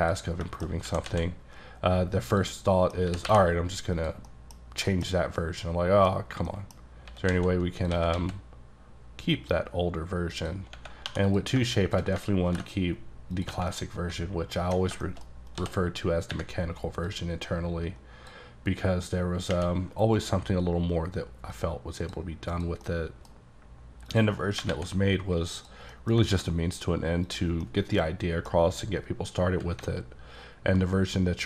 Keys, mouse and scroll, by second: 0.0 scroll up 1, 0.1 ctrl+click, 0.5 shift+middle click, 0.9 typing, 2.3 click, 2.8 middle click, 3.1 g, 3.3 y, 4.0 click, 4.3 middle click, 4.9 shift+middle click, 5.2 middle click, 5.2 scroll up 2, 5.4 scroll down 1, 5.8 middle click, 6.2 scroll up 1, 6.5 middle click, 7.1 s, 7.3 z, 8.0 s, 8.2 x, 10.4 click, 11.1 2, 11.3 click, 12.5 ctrl+b, 13.4 click, 13.8 middle click, 15.4 scroll up 2, 15.6 d, 17.1 click, 21.6 click, 22.2 click, 22.6 click, 22.9 middle click, 24.1 click, 24.4 scroll down 2, 24.8 alt+x, 25.7 click, 26.0 middle click, 26.1 scroll down 1, 26.4 x, 27.3 click, 27.7 middle click, 28.6 scroll up 2, 30.2-30.6 alt+scroll up 1, 30.6-31.4 alt+scroll down 3.